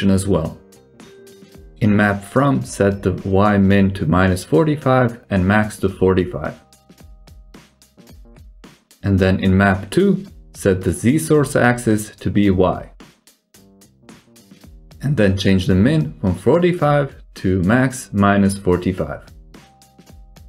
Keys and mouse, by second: 0.2 Escape, 3.4-6.2 drag, 13.3-14.3 drag, 15.4-18.7 drag, 15.5 BackSpace.